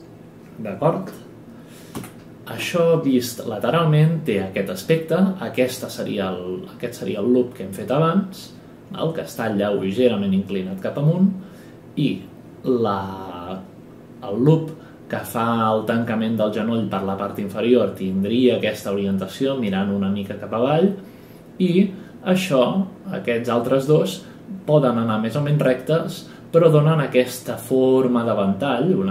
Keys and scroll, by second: 1.9 Right, 3.4 Print.